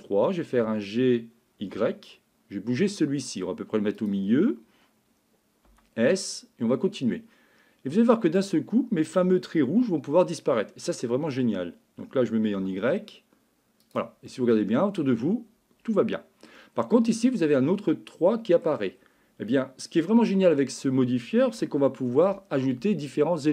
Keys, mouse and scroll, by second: 0.6 g, 5.7 s, 9.2 g, 14.3-16.5 middle drag, 17.4-18.7 middle drag, 19.5-20.8 middle drag, 21.6 shift+middle click.